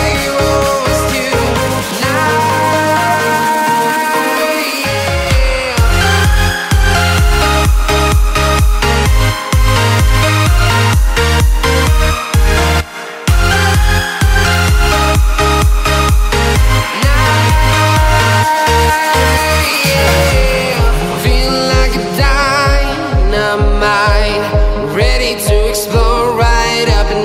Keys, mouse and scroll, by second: 1.7 right click.